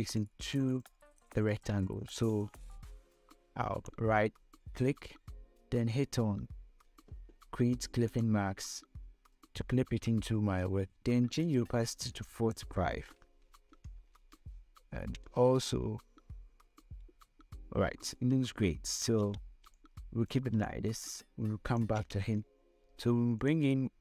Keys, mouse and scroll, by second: 0.1 click, 3.7 right click, 8.4 click, 11.7-15.3 drag, 16.5 scroll up 1, 17.4-18.0 scroll down 1, 18.7-22.0 typing, 18.9 click, 19.7 scroll down 1, 20.1 click, 21.2 click, 23.5-24.0 drag.